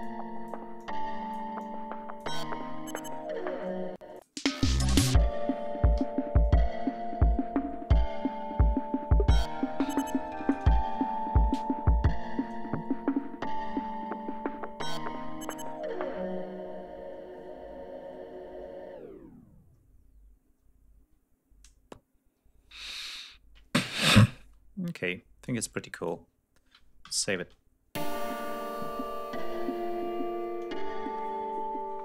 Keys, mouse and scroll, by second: 0.0 click, 0.8 click, 1.6 click, 4.0 space, 4.2 click, 4.7 scroll up 2, 6.0 d, 6.4-6.8 scroll down 2, 7.8-8.1 scroll up 2, 12.8 ctrl+scroll up 2, 17.1-17.5 ctrl+scroll down 4, 17.8 ctrl+scroll up 2, 18.3-18.8 ctrl+scroll down 3, 19.2-19.9 scroll up 4, 23.8 space, 24.5 ctrl+scroll down 2, 25.4 click, 27.0 ctrl+s, 27.3 ctrl+space, 28.6-29.4 scroll down 4, 29.7 scroll down 2.